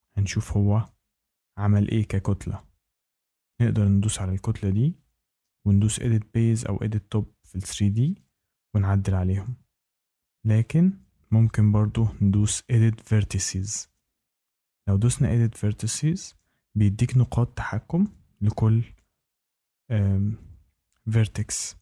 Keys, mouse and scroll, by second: 3.8 click, 7.5 click, 15.3-16.3 drag, 16.4 click, 17.0 click, 20.3 click.